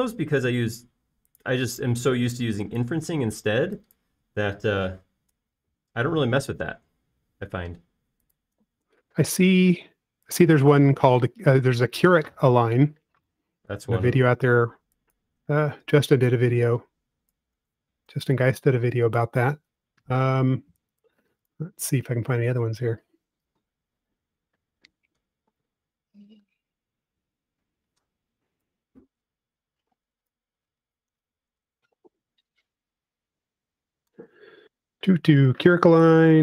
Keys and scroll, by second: 3.1 e, 8.8 space, 9.4 space, 17.4 f, 18.6 typing, 19.1 Return, 20.3 e, 24.9 space, 29.2 p, 31.7-33.8 typing.